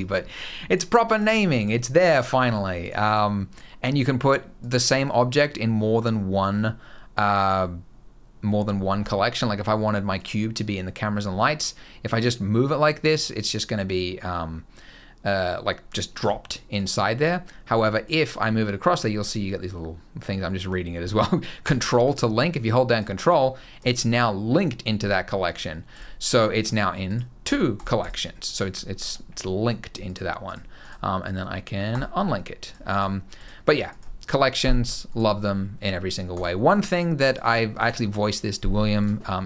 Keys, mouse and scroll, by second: 0.5 click, 0.9 click, 1.4 click, 1.9 click, 2.6 click, 2.9 click, 4.3 click, 9.9 click, 16.5 click, 17.8 click, 23.5 click, 25.2 click, 25.7 click, 26.8 click, 27.2 click, 27.5 click, 27.7 click, 29.8 click, 30.2 click, 30.6 right click, 32.4 click, 32.6 click, 33.1 click, 33.6 click, 34.8 click, 36.1 click, 36.6 click, 37.0 click, 38.7 click.